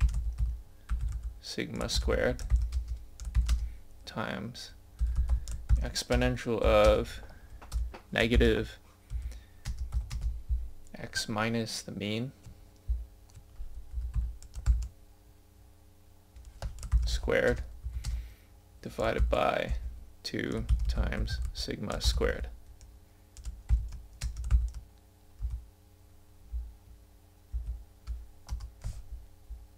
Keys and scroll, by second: 11.4 scroll up 1, 12.0 scroll down 1.